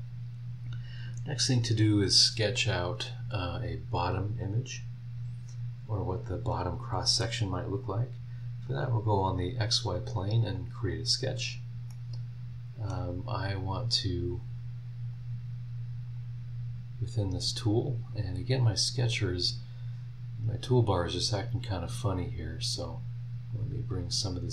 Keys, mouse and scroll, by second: 8.7 click, 10.5 click, 11.6 scroll up 1, 11.9-13.1 middle drag, 15.0 click, 16.0 click, 21.8 click, 22.7 click.